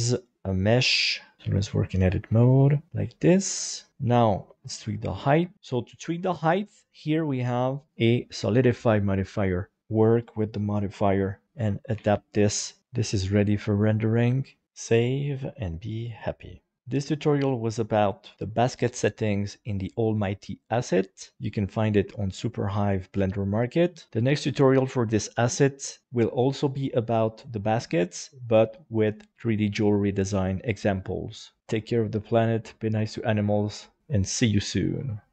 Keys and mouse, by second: 0.3 click, 0.7 r, 1.4 alt+z, 2.3 s, 2.9 click, 2.9 g, 3.1 middle click, 4.4 middle click, 4.5 g, 4.5 z, 5.2 click, 5.5 Tab, 5.8 shift+middle click, 6.2 middle click, 7.9 click, 8.6 click, 9.8-11.0 drag, 11.4 middle click, 11.9 alt+a, 12.4 middle click, 13.5 middle click, 13.8 middle click, 14.4 shift+middle click, 14.9 ctrl+s.